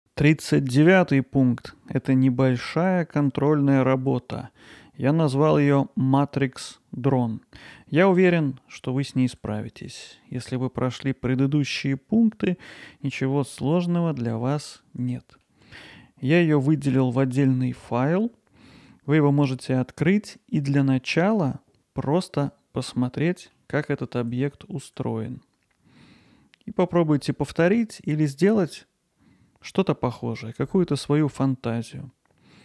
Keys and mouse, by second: 2.0 middle click, 2.9-4.1 alt+middle drag, 9.4-15.9 alt+middle drag, 19.6 middle click, 23.2 middle click, 24.3-32.6 alt+middle drag.